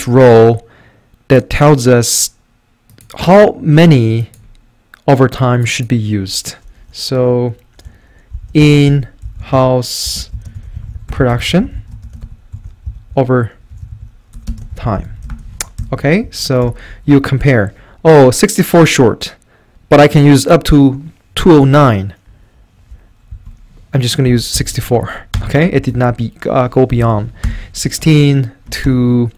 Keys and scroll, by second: 8.1-15.8 typing, 16.2 Right, 16.6 Return, 17.1 Up, 23.3 Down, 24.0-25.0 typing, 25.4 Return, 25.8 Right, 25.9 Up, 26.6-27.4 typing, 27.4 Return, 28.8 2, 29.0 Return.